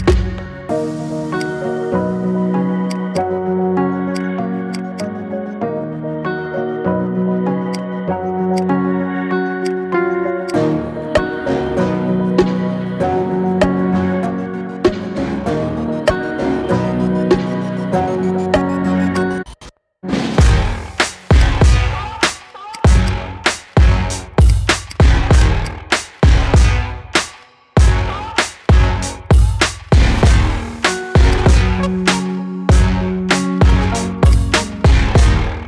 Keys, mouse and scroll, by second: 0.6 Tab, 1.1 click, 2.3 ctrl+a, 2.9 click, 3.5 ctrl+a, 4.5 shift+drag, 4.7 shift+click, 5.4 Tab, 7.5 click, 8.4 shift+click, 9.5 shift+click, 10.3 shift+click, 11.4 ctrl+shift+b, 16.8 Tab, 17.5 s, 20.1 click, 20.5-21.2 middle drag, 21.2 drag, 21.7-22.5 middle drag, 22.5 shift+click, 22.9 shift+drag, 23.5 Tab, 24.2 click, 24.6 click, 25.1 shift+click, 25.4 shift+click, 26.1 KP_3, 27.2 e, 31.3-31.6 scroll up 2, 31.6-32.8 shift+middle drag, 32.8-34.0 scroll down 1, 34.0 click, 35.5 click.